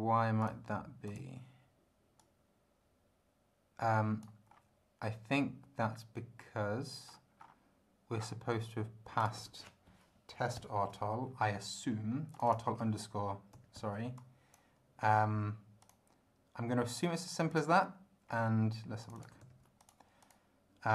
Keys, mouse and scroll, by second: 0.4 click, 1.1 click, 2.2-4.4 drag, 4.5 scroll up 1, 7.0-7.6 scroll up 2, 8.2-8.5 scroll down 2, 9.2 click, 10.6 ctrl+alt+b, 12.3 click, 13.5 ctrl+c, 14.2 ctrl+click, 15.8 click, 17.5 click, 18.3 scroll down 2, 19.0 click, 19.4 ctrl+v, 19.8 ctrl+click, 20.2 ctrl+click.